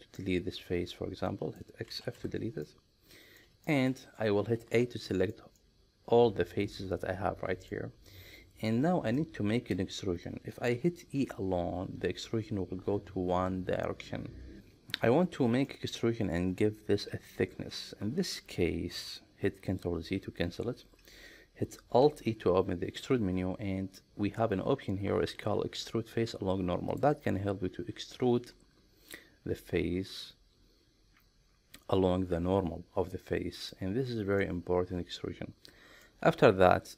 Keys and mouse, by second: 0.2-1.6 middle drag, 1.9 x, 2.7 middle click, 3.7 shift+middle click, 4.6 a, 5.1 shift+middle click, 5.6-7.8 middle drag, 9.2-10.7 middle drag, 11.2 e, 14.6 middle click, 15.7 middle click, 17.4 ctrl+z, 22.1 alt+e, 33.6 click, 34.4-36.1 middle drag.